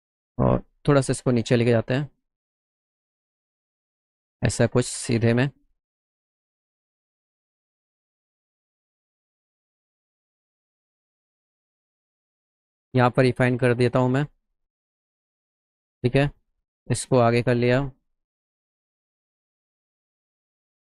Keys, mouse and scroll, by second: 0.5-1.6 drag, 4.6 shift+click, 6.3-9.8 drag, 10.6 click, 11.3 scroll up 1, 12.1 click, 13.0 click, 14.1 click, 15.3 click, 15.5 right click, 16.0 click, 17.2 click, 19.5 click, 20.5-20.8 drag.